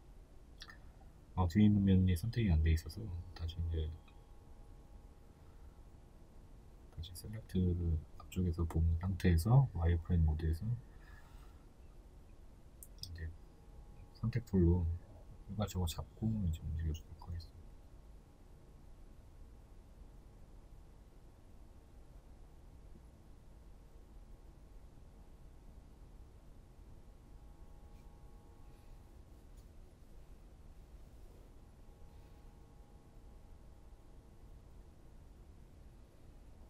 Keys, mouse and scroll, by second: 2.6 right click, 3.6 b, 5.8 click, 6.2 right click, 6.8-7.9 right drag, 7.9 b, 10.0 click, 10.3 right click, 10.8 right click, 12.8 b, 15.7 click, 16.0 right click, 17.5 b, 20.8 right click, 22.1 b, 22.9 right click, 23.3 right click, 24.1 right click, 25.0 b, 28.0 right click, 28.7-30.3 right drag, 30.3 b, 33.1 click, 33.4 right click, 34.1-36.3 right drag, 36.3 b.